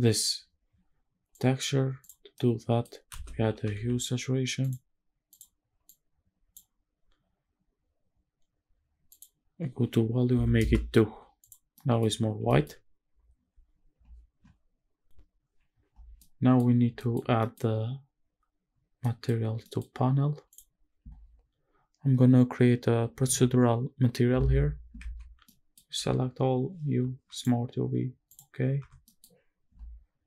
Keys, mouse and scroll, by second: 1.0 click, 1.7 click, 2.1 middle click, 2.8 space, 5.5 click, 7.2-8.1 scroll up 1, 8.7 scroll up 1, 8.8-10.3 drag, 11.1 click, 11.4 middle drag, 12.1 shift+middle drag, 15.1 scroll up 1, 16.2-16.6 middle drag, 16.7 scroll up 2, 17.0 shift+middle click, 17.3 scroll down 1, 17.4 middle click, 19.1 middle drag, 19.5 scroll down 2, 19.6 middle click, 19.9-20.5 scroll up 1, 20.5 click, 25.0 Tab, 25.5 middle click, 25.9 a, 26.9 u, 28.8 Tab, 29.1 middle click.